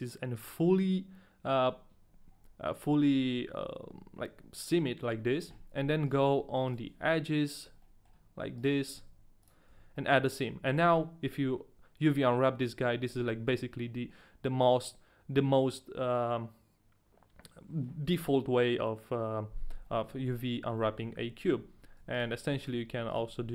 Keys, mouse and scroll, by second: 6.1 right click, 6.9 shift+right click, 7.7 shift+right click, 7.8 middle click, 8.7 shift+right click, 8.7 middle click, 9.1 ctrl+e, 9.1 shift+right click, 9.1 middle click, 9.7 a, 9.9 middle click, 19.9 middle click, 20.4 shift+middle click, 20.5 scroll up 2, 20.8 middle click.